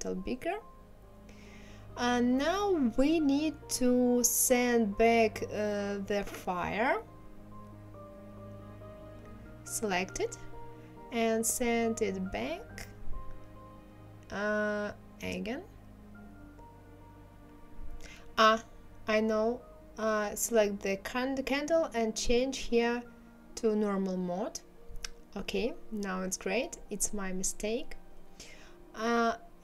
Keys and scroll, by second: 1.1 KP_1, 1.4 KP_0, 2.0 Return.